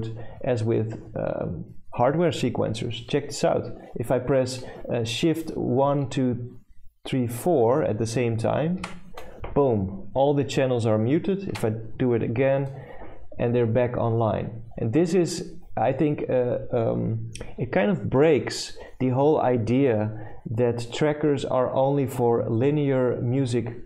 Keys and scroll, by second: 8.5-9.4 typing, 11.2-12.0 typing.